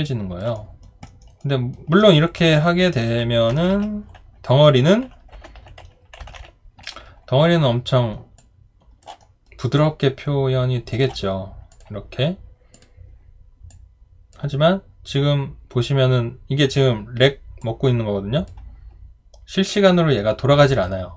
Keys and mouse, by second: 0.0 alt+click, 0.5 alt+right click, 1.1 alt+middle click, 1.4 alt+right click, 8.4 alt+click, 9.2 alt+right click, 9.8 alt+click.